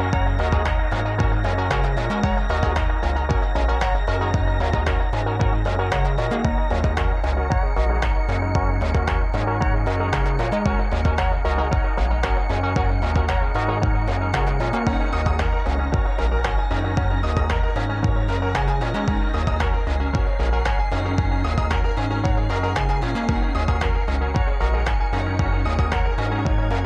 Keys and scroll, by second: 0.5 ctrl+z, 5.1 Escape, 7.4 shift+a, 12.3 Tab, 13.0 Caps_Lock, 13.3 Tab, 14.1 shift+a, 22.0 Tab, 23.5 1, 24.0 e, 25.2 e.